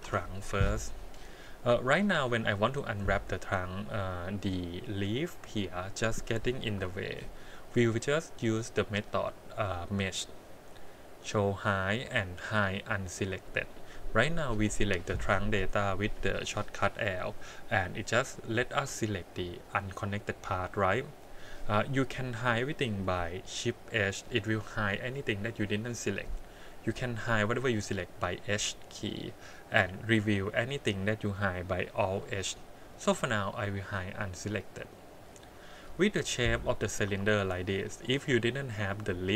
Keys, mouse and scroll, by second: 0.0 l, 2.6-3.8 middle drag, 4.5 middle click, 5.9 middle click, 6.7 KP_1, 9.7 click, 34.4 click, 35.2 click, 36.3-37.1 scroll up 1, 37.1 2, 37.5 middle click, 37.9 middle click, 39.2-39.3 middle drag.